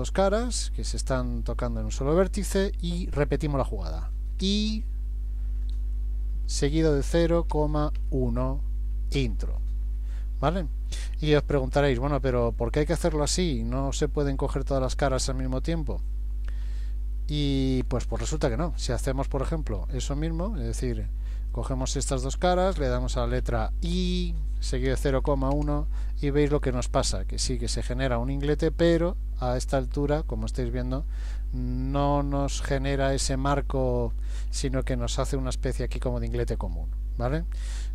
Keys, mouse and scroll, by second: 0.5 shift+click, 4.5 typing, 12.0-12.8 scroll up 1, 12.8-13.4 scroll up 1, 18.3 ctrl+z, 19.5 ctrl+z, 19.9 ctrl+z, 20.3 ctrl+z, 20.9 ctrl+z, 21.4 click, 22.0 shift+click, 23.4 i.